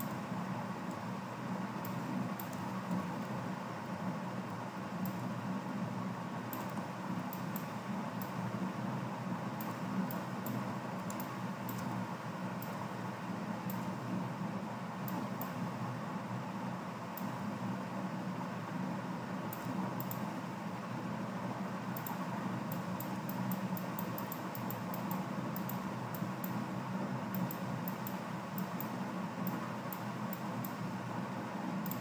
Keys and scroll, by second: 2.9 ctrl+g.